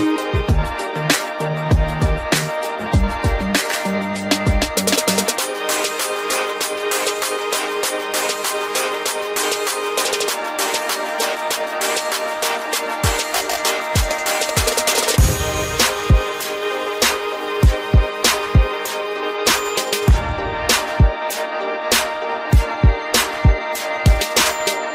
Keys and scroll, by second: 3.1 ctrl+0.